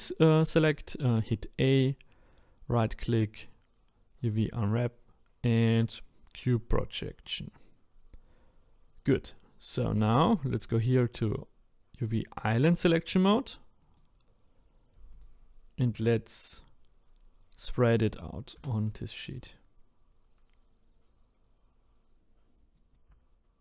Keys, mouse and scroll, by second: 15.2 click, 18.6 g, 22.9 click, 23.1 g.